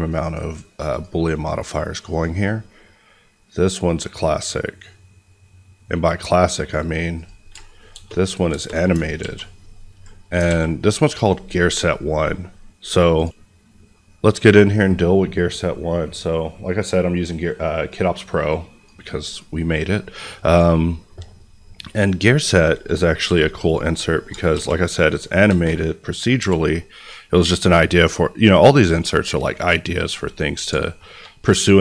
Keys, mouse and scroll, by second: 7.5 shift+click, 7.9 shift+space, 9.1 ctrl+z, 10.4 alt+a, 13.1 click, 15.1-15.6 scroll down 1, 15.9-17.8 scroll down 1, 17.8 click, 21.3-22.2 scroll up 1, 22.2 click, 23.2 g, 23.6 right click, 24.5 space, 26.3 n, 27.4 click, 30.0 middle click, 30.8 shift+middle click, 31.7 ctrl+s.